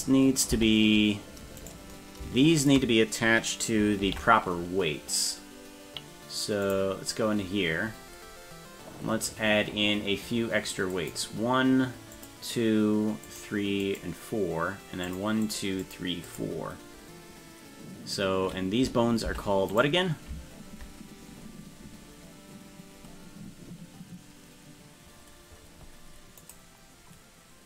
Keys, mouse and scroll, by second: 0.5 Tab, 1.6 right click, 2.6 shift+right click, 4.0 ctrl+l, 6.6 click, 7.4-8.4 scroll down 19, 10.9 click, 12.1 click, 13.2 click, 13.8 click, 15.0 click, 15.4 click, 15.8 click, 16.3 click, 19.3 Tab, 19.7 right click.